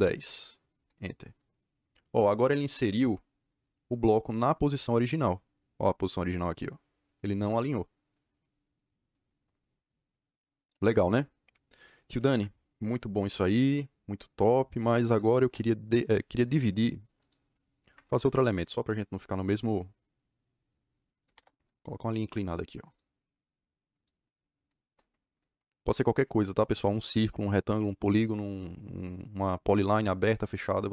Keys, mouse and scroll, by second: 0.7 KP_Enter, 12.1 Escape, 12.2 Escape, 14.8-15.7 typing, 17.1 click, 17.8 Escape, 21.1 l, 21.2 Return, 23.8 click, 24.8 Return.